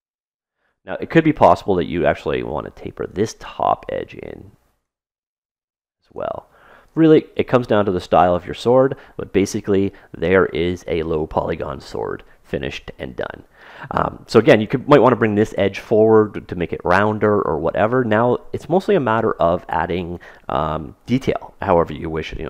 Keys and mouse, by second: 1.2-2.7 middle drag, 2.7 click, 2.7 right click, 3.3 middle click, 3.6-5.2 drag, 5.7 right click, 6.6-8.3 drag, 8.3-11.2 middle drag, 17.1-19.0 middle drag.